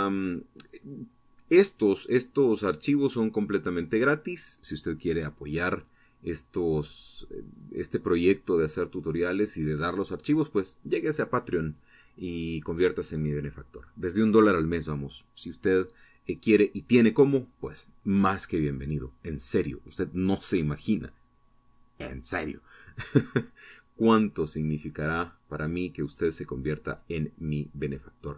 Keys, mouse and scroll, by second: 27.7 Tab.